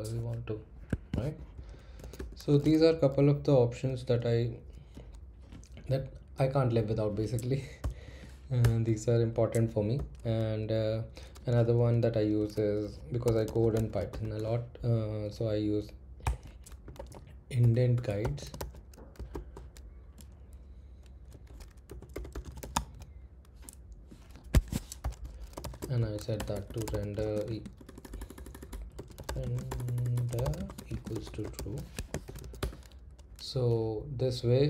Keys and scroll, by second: 0.9 Escape, 1.7-3.1 typing, 5.9 Right, 6.6 Down, 7.8 o, 8.6 Return, 9.9 [, 13.0-14.7 typing, 16.2-19.6 typing, 21.1-23.2 typing, 24.5 Escape, 25.0-27.6 typing.